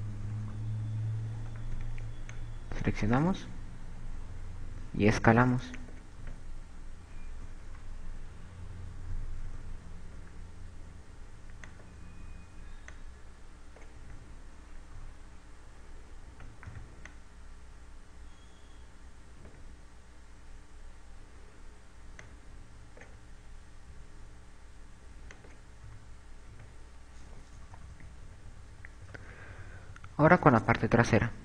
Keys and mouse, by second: 0.7 click, 1.3 KP_2, 1.6 KP_2, 2.5 z, 2.9 b, 4.9 s, 7.1 click, 7.4 z, 8.6 KP_2, 8.9 KP_2, 9.5 KP_8, 10.6 KP_8, 11.2 s, 13.0 click, 13.5 click, 15.3 a, 16.1 KP_6, 17.5 z, 17.9 b, 22.5 click, 25.0 s, 26.6 click, 27.0 a, 27.2 z, 28.7-31.4 typing.